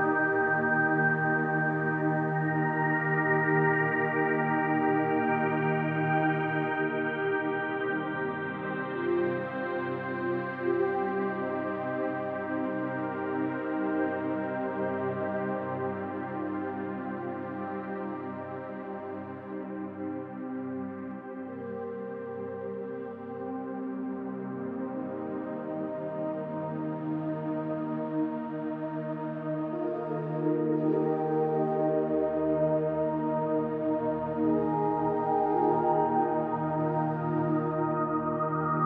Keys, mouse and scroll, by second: 1.2 click, 1.8-3.1 ctrl+drag, 3.5-4.3 drag, 5.0 ctrl+d, 5.4-5.9 drag, 6.1 ctrl+d, 7.3 click, 8.1 ctrl+d, 8.3-9.0 drag, 9.2 ctrl+d, 9.4-9.8 drag, 9.9 ctrl+d, 10.2 click, 10.9 ctrl+d, 11.2-12.2 drag, 12.3 ctrl+d, 12.6-13.0 drag, 13.2 ctrl+d, 13.3 click, 13.8 ctrl+d, 13.9-14.5 drag, 15.7 space, 16.2 space, 17.5 ctrl+d, 18.4-19.2 drag, 19.5 ctrl+d, 20.2 click, 20.9 ctrl+d, 21.6 ctrl+d, 21.7-22.7 drag, 22.7 ctrl+d, 22.9 click, 23.3 ctrl+d, 23.5-24.1 drag, 24.2 ctrl+d, 25.1 ctrl+d, 25.4-26.2 drag, 26.4 space, 27.9 ctrl+d, 28.7-29.5 drag, 30.4 ctrl+d, 30.9-31.8 drag, 32.8-34.4 drag, 35.1 space, 36.0 space, 37.0 click, 37.8 ctrl+d, 38.3-38.8 drag.